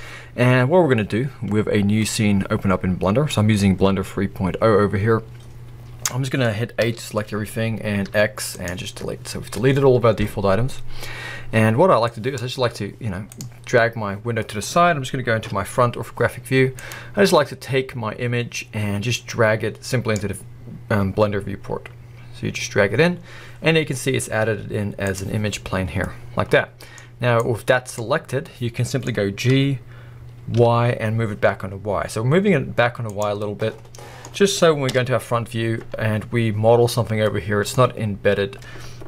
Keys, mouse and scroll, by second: 0.8-2.0 scroll down 1, 2.0-3.3 middle drag, 5.8 scroll down 1, 6.1 middle click, 6.8 a, 8.0 x, 11.4-12.2 scroll down 1, 12.2 middle click, 12.4 middle click, 12.6 scroll down 1, 14.4 middle click, 15.4 KP_1, 22.6-23.2 scroll up 1, 26.0-27.4 middle drag, 27.0-27.4 scroll down 1, 27.4 click, 28.4-29.1 middle drag, 29.6 g, 33.2 click, 33.4 middle click, 34.9 KP_1, 35.8 scroll up 1, 37.0 scroll down 1, 37.2-37.7 middle drag.